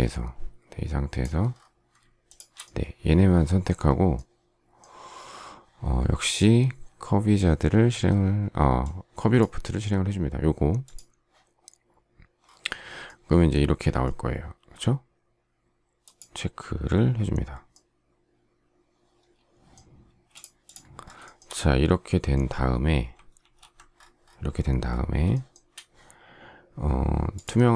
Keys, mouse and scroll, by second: 2.2 shift+click, 20.0 space, 21.2 shift+middle click, 23.3 alt+f, 25.3 shift+middle click.